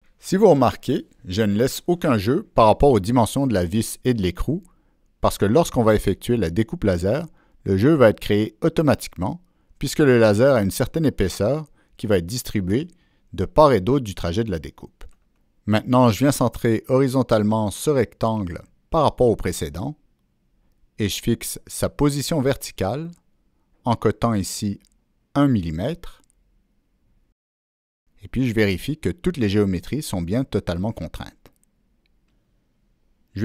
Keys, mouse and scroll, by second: 11.0-11.8 drag, 17.2-19.4 drag, 19.9 right click, 21.7 click, 22.6 click, 23.5 click, 23.6 right click, 24.5 click, 25.6 Return, 27.2 Escape, 28.9 click, 30.3 click, 30.5 Escape.